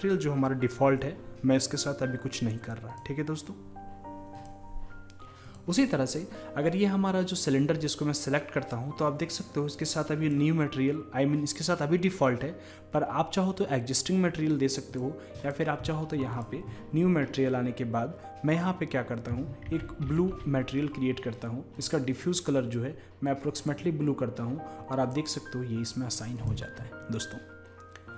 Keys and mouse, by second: 5.5-7.4 drag, 10.3-12.2 drag, 15.4-18.2 drag, 22.1-24.0 drag, 25.0-27.0 drag.